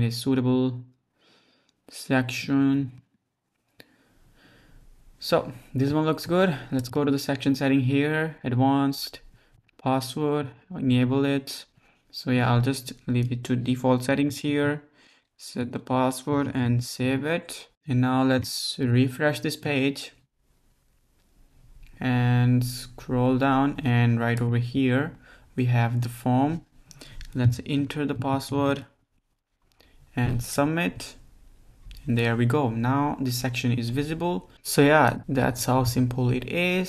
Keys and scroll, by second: 14.3-16.4 typing, 16.7 super+s.